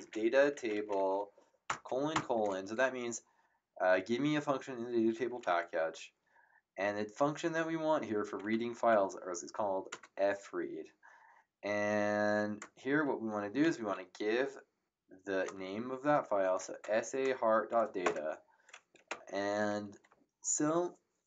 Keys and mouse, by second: 0.0-1.4 typing, 7.9-9.0 typing, 9.9 Tab, 15.2 shift+s, 16.3 shift+a, 16.8 Tab, 18.0 Return.